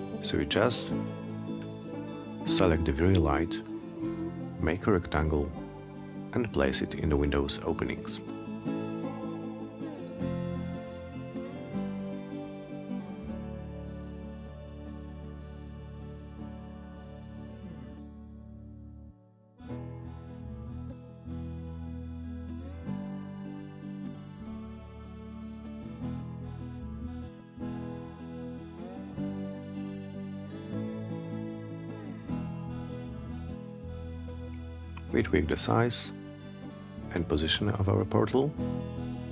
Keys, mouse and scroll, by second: 0.0-3.4 drag, 3.9-5.2 middle drag, 5.4 scroll up 1, 5.6 e, 6.7-9.0 drag, 9.4 alt+middle click, 10.3 w, 11.0 click, 13.0 click, 14.2 w, 14.9-17.0 drag, 17.2 middle click, 17.5 middle click, 18.2 middle click, 18.6 middle click, 19.1 middle click, 19.5-19.9 scroll up 1, 21.1 click, 23.0-26.0 drag, 28.0-29.9 drag, 31.2-32.9 drag, 34.0-35.3 drag, 36.4-37.5 drag, 37.9 alt+middle click.